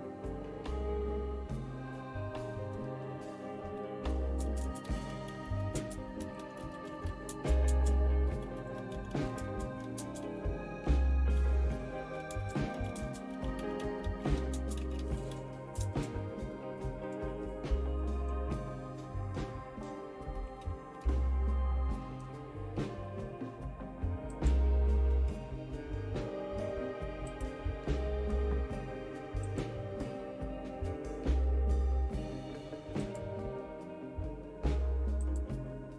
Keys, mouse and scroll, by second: 3.2-10.2 typing, 11.4-15.8 typing, 16.9-17.6 typing, 20.1-21.5 typing, 27.4-28.4 drag, 30.3 click, 33.2-34.3 drag, 35.2 click, 35.6 right click.